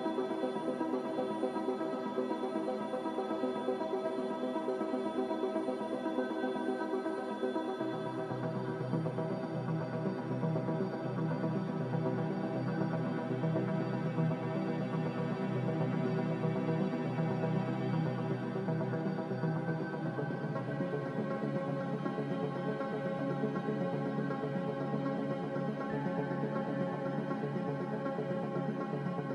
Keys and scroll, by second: 0.0-0.5 typing, 3.5 a, 7.9 z, 9.2-10.0 typing, 13.1 x, 14.6 g, 16.8 z, 19.2 a, 21.2 f, 24.4 z, 28.5 f.